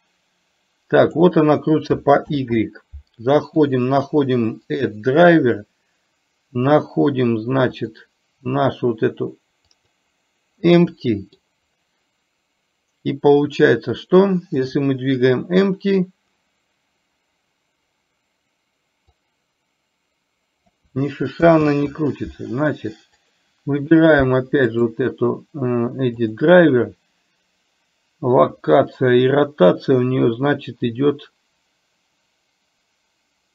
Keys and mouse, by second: 0.0-1.2 drag, 2.5 ctrl+z, 3.6-10.2 right drag, 11.0 middle click, 14.7 click, 19.2 click, 19.5-20.7 drag, 21.7 ctrl+z, 23.2 click, 24.9-33.5 right drag.